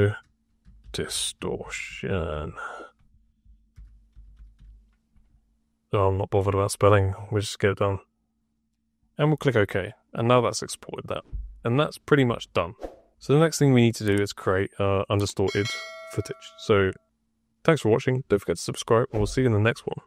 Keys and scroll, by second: 0.0-4.5 typing.